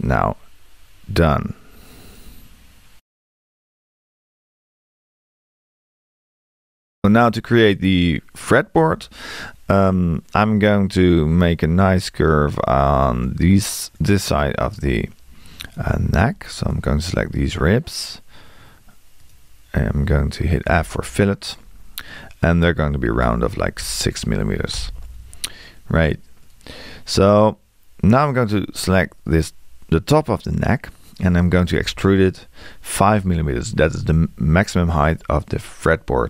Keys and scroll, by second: 23.8 6, 31.8 e, 33.1 5.